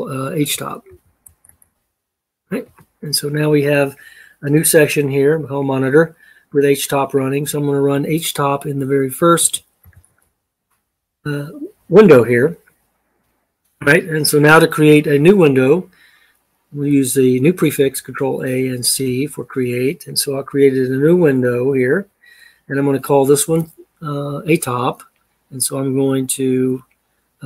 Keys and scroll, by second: 0.1-1.8 typing, 2.4 Return, 9.4-10.4 typing, 17.6 ctrl+a, 18.8 c.